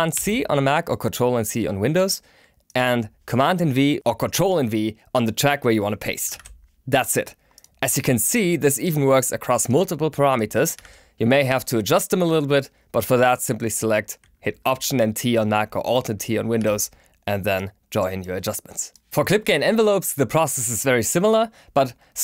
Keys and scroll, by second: 0.1 super+c, 6.2 super+v, 10.7 super+v, 16.5 alt+t.